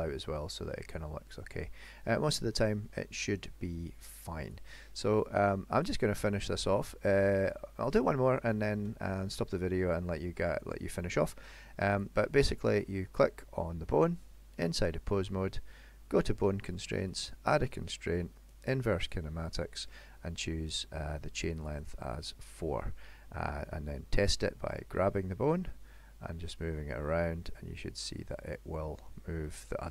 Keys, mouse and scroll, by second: 2.2 middle click, 4.5 click, 6.6 middle click, 7.5 shift+middle click, 8.2 middle click, 8.7 shift+middle click, 10.9 middle click, 12.0 click, 16.1 click, 17.1 click, 21.4 click, 21.7 click, 22.2 click, 24.9 g.